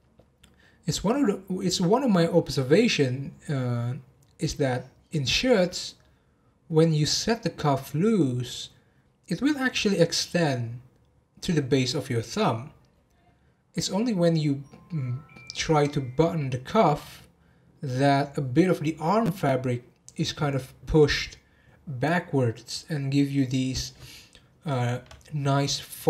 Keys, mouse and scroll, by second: 25.4 scroll up 2, 25.9-26.0 scroll down 2.